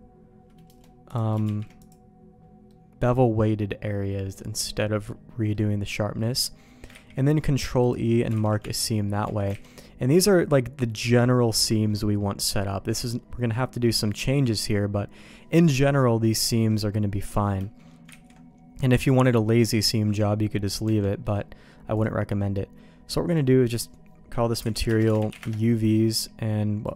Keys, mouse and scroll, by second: 1.0 click, 1.4 shift+g, 2.6-4.3 middle drag, 4.7 middle click, 6.1 middle click, 6.9 ctrl+e, 8.3 alt+a, 8.5 Tab, 9.0 middle click, 9.2 Tab, 9.5 alt+a, 9.6 middle click, 10.2 middle click, 11.6 middle click, 12.7 middle click, 13.9 middle click, 15.7 middle click, 16.5 middle click, 17.0 middle click, 18.1 ctrl+s, 20.8 Tab, 21.2 middle click, 23.2-25.9 drag, 25.0 BackSpace, 26.8 click.